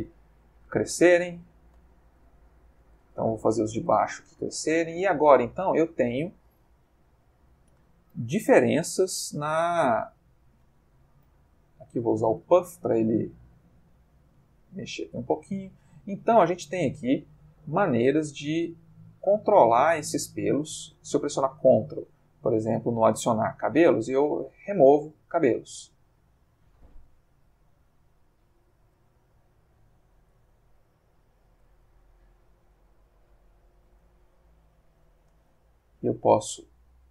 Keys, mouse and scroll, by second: 7.5 click, 8.1-9.0 drag, 9.0 f, 9.3-15.0 drag, 15.5 click, 16.2-17.0 drag, 17.1 click, 18.0 click, 18.8 click, 19.5 click, 19.9-20.5 drag, 21.1 ctrl+click, 22.7 click, 23.5-24.9 ctrl+drag, 25.4-27.5 ctrl+drag, 29.1 f, 30.0 click, 30.5-31.8 ctrl+drag, 32.0-33.8 ctrl+shift+drag, 34.0-35.4 ctrl+shift+drag.